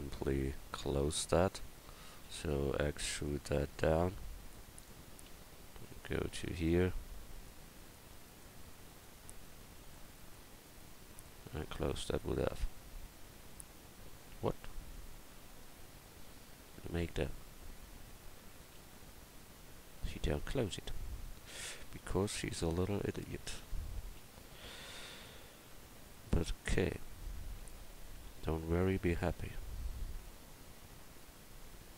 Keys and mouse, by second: 2.3 e, 5.9-10.3 right drag, 12.6 f, 16.0 f, 18.8 ctrl+z, 22.2 right click, 24.2 f, 29.3 c.